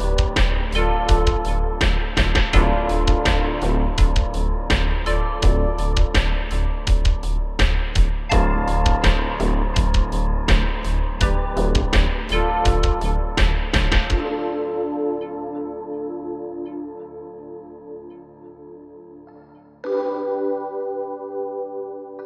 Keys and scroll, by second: 4.6-5.7 typing, 9.5 space, 12.6 space, 12.8 space, 15.6 f, 16.6 space, 16.6 space, 17.1 space, 17.6 super+z, 19.0-22.2 typing.